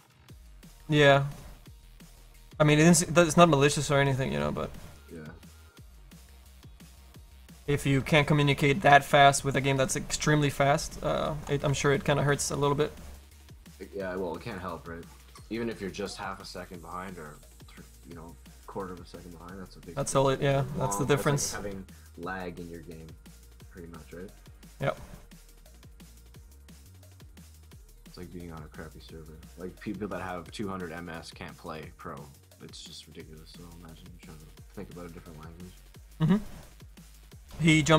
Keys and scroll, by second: 29.0 s.